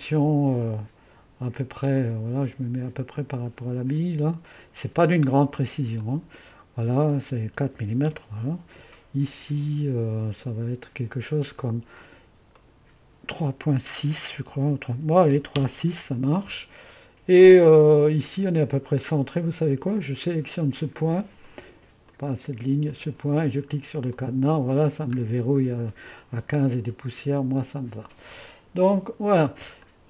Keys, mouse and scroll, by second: 2.0-4.3 drag, 4.5-6.5 drag, 7.5-8.3 typing, 10.5 click, 12.6-14.9 drag, 14.9 KP_3, 15.2 KP_Decimal, 15.3 KP_6, 15.6 Return, 19.4-20.4 drag, 21.5-25.0 drag, 25.3-26.4 scroll down 1, 26.4-27.4 scroll up 1, 27.4 click, 28.8-29.9 drag, 29.0 2.